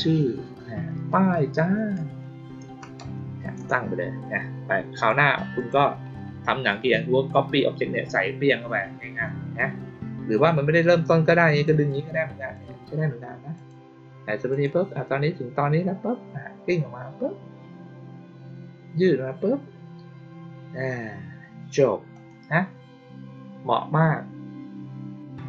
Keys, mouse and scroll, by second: 4.9 click, 5.5 click, 11.6 click, 13.5 click, 14.4 click, 22.1 click.